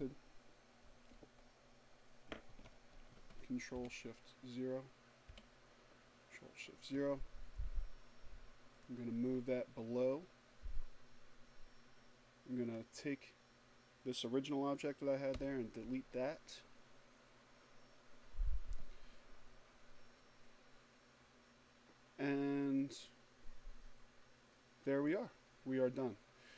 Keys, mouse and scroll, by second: 1.5 ctrl+shift+o, 3.0 o, 6.7 click, 13.1 Delete, 26.1 click.